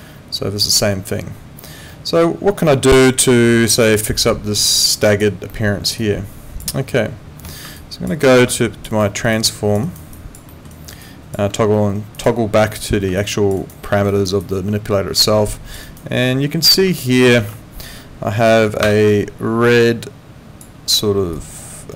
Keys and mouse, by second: 7.4 Escape, 7.8 alt+click, 8.2 alt+middle click, 8.6 alt+click, 9.0 alt+middle click, 9.3 alt+right click, 9.4 alt+click, 9.8 alt+right click, 10.1 alt+click, 10.5 alt+middle click, 10.7 alt+right click, 11.0 alt+click, 12.1 click, 13.2 alt+click, 13.6 alt+right click, 13.8 alt+middle click, 14.1 alt+right click, 14.4 alt+click, 15.8 alt+right click, 17.4 ctrl+2.